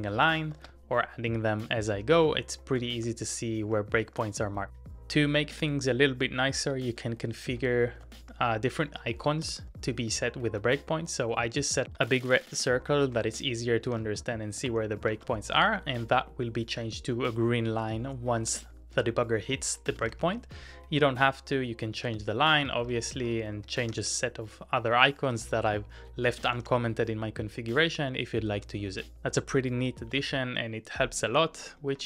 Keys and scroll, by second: 0.6 ctrl+w, 0.7 l, 2.8 shift+v, 3.0 shift+v, 3.6 shift+v, 7.5 ctrl+x, 8.0 shift+v, 8.2 shift+v, 8.9 shift+v, 12.7 ctrl+x, 13.1-15.3 typing, 14.6 Return, 15.9 Return, 18.2-20.6 typing, 21.7-22.3 typing, 23.7-30.8 typing.